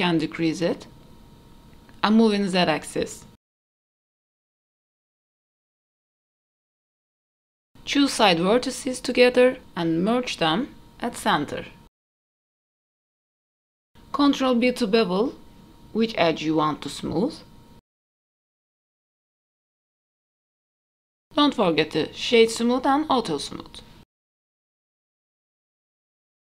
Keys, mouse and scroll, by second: 4.3 KP_3, 4.5 scroll up 2, 4.6 shift+middle click, 4.8 click, 5.1 click, 5.7 middle click, 5.9 shift+middle click, 6.1 shift+d, 6.5 scroll up 3, 6.6 middle click, 7.0-8.2 scroll down 3, 7.2 middle click, 8.2 scroll down 1, 8.3 click, 9.3 m, 10.2 click, 11.2 m, 12.2 Tab, 12.7-13.1 scroll up 3, 12.7 KP_3, 13.0 middle drag, 13.2-13.6 scroll down 3, 13.2 z, 13.7 click, 13.8 shift+middle click, 14.0 middle click, 15.0 scroll up 2, 15.3 Tab, 16.4 2, 16.6 click, 17.0 middle click, 17.5 ctrl+b, 19.8 middle click, 19.9 g, 20.2 middle click, 20.2 click, 20.3 shift+click, 20.4 middle click, 20.5 ctrl+b, 20.9 Tab, 20.9 middle click, 22.2 middle click, 22.8 right click, 23.8 click, 24.6 click, 25.5-25.9 drag, 26.4 middle click.